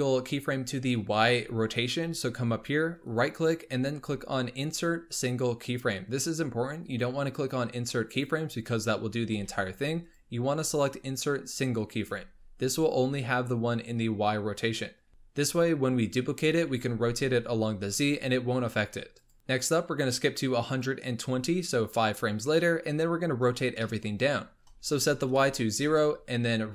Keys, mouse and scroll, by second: 3.0-6.1 right drag, 9.3 ctrl+z, 10.0-15.1 right drag, 15.1-16.7 scroll up 3, 16.7 r, 19.3 click, 20.8-23.8 drag, 23.8-24.6 shift+middle drag, 24.6 BackSpace.